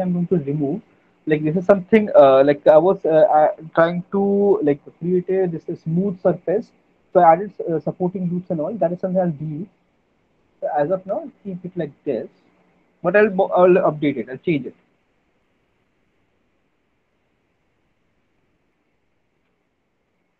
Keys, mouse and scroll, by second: 0.7 middle click, 12.1 click, 12.7 middle click, 13.1 middle click, 14.6 alt+middle click, 14.7 alt+middle click, 14.8 middle click, 16.8 click, 17.7 alt+middle click, 17.9 middle click, 18.1 alt+middle click, 18.8 alt+middle click, 19.3 alt+click, 19.9 alt+middle click.